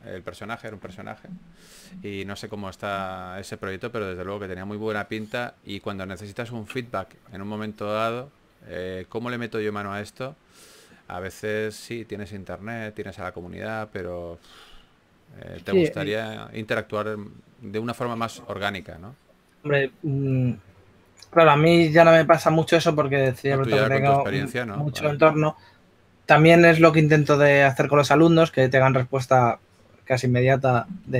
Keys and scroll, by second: 1.2 s, 6.6 2, 7.9 super+z, 9.3 2, 10.8 typing, 12.5 2, 19.7-20.6 typing.